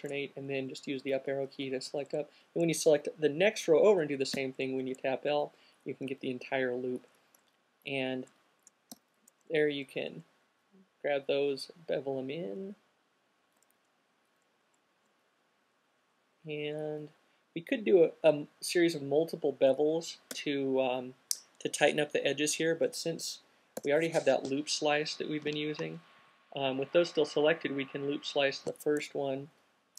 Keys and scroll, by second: 0.9-1.3 fn+Up, 9.2 b, 20.6 q, 24.2 c, 24.8 q.